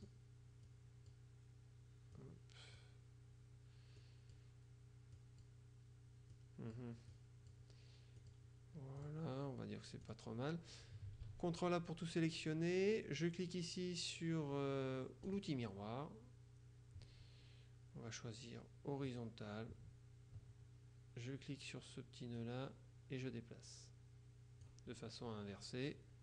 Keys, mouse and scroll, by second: 0.8 click, 2.2 click, 4.1 click, 5.2 click, 6.4 click, 8.3 click, 9.0 click, 10.1 click, 11.3 ctrl+a, 15.4 click, 19.2 click, 22.5-25.2 drag.